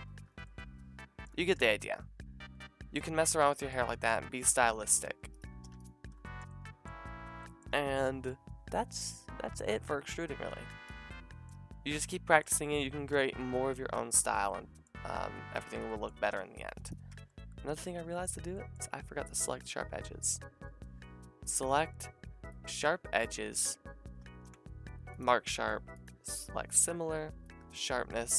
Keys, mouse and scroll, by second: 0.0 middle click, 0.2 a, 4.9 click, 5.0 g, 5.7 x, 8.0-15.7 middle drag, 15.7 click, 15.8-16.5 middle drag, 16.5 click, 16.6 middle click, 16.8 click, 16.9-19.3 middle drag, 17.1 Tab, 19.3 click, 19.3-20.7 middle drag, 20.7 ctrl+z, 20.7 a, 24.3 ctrl+e.